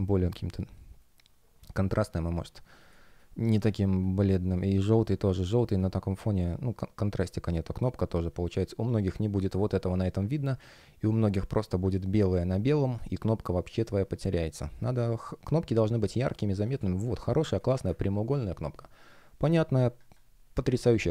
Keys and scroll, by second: 2.8 space, 14.6 space, 19.9 F1, 21.0 space.